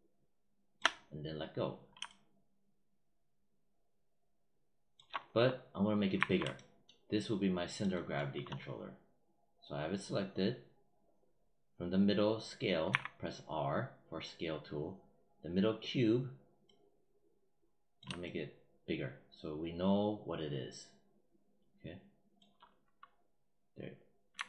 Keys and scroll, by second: 6.0 r, 12.7 r, 24.2 w.